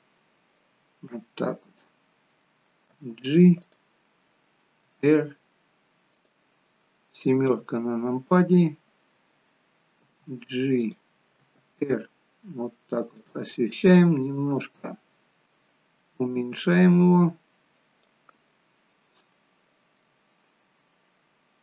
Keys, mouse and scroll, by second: 2.9 g, 5.0 r, 6.5-7.4 scroll down 1, 7.4 scroll down 4, 7.4 KP_7, 10.0 g, 11.5 r, 18.5 middle click, 20.1 middle click, 21.4-21.6 scroll up 3.